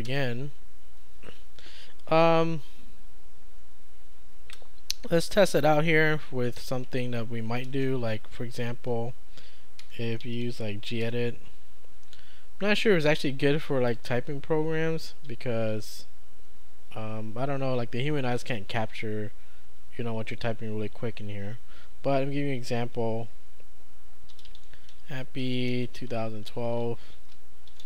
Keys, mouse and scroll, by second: 7.8 ctrl+space, 9.9-11.0 typing, 14.0 click, 24.1-27.8 typing.